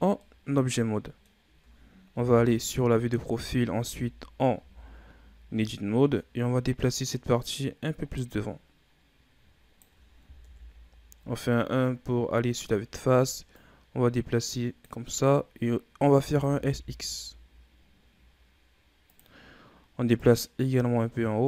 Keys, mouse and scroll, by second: 0.1-2.1 middle drag, 2.1 KP_3, 3.2 Tab, 3.6 a, 4.5 a, 5.5-8.5 drag, 10.4 KP_1, 11.5-13.4 scroll down 4, 13.4-16.1 drag, 16.1 s, 19.3-20.0 scroll up 3, 20.0-21.4 drag.